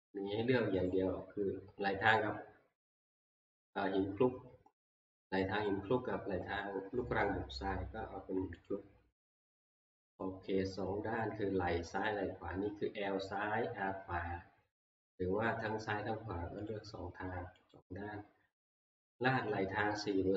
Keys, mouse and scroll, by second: 0.9 click, 8.7 click, 10.2 click, 16.7 click, 17.7 click, 19.4 click.